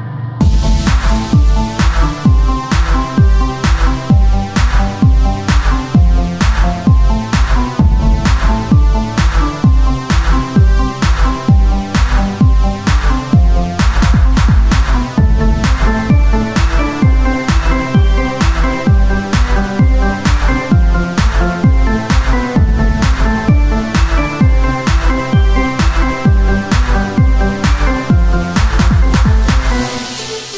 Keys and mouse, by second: 1.0-4.6 drag, 2.8 z, 4.6 shift+d, 6.0-10.8 drag, 10.8-13.3 right drag, 10.9 z, 11.2 c, 14.7 z, 15.9-18.9 typing, 17.1 click, 17.1-18.2 right drag, 18.3 middle click, 20.7-24.2 drag, 20.8 z, 24.2 KP_1, 24.9-26.2 middle drag, 25.6 r, 26.2 z, 26.8 z, 27.9 shift+d, 28.9 z, 29.1-30.5 drag.